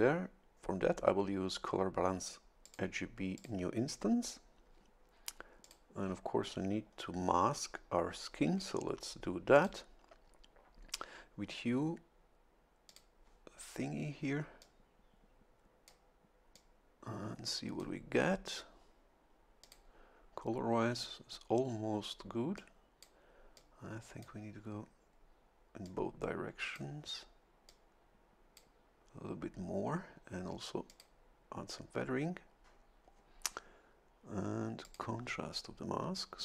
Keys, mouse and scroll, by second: 2.6 click, 3.3 click, 5.6 click, 6.9-7.5 scroll down 3, 9.5 click, 12.9 click, 14.6-16.1 drag, 16.5-18.5 drag, 19.6 click, 22.5 click, 23.5 click, 25.8-26.9 drag, 27.7-28.7 drag, 30.9 click, 34.8 click.